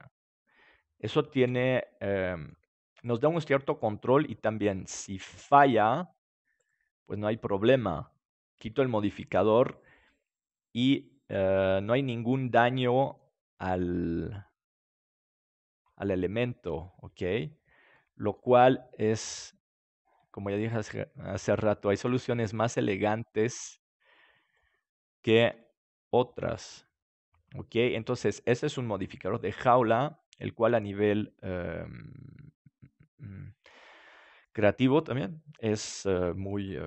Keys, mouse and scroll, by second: 1.9-3.8 middle drag, 3.0-6.1 right drag, 3.8-6.1 drag, 6.5-8.6 right drag, 7.1-9.3 drag, 9.3 middle click, 14.2-16.0 drag, 16.6-21.2 middle drag, 19.8-21.2 right drag, 21.2-24.2 drag, 25.4 s, 27.3-29.2 drag, 30.1 Tab, 30.7-32.1 middle drag, 36.1-36.8 middle drag.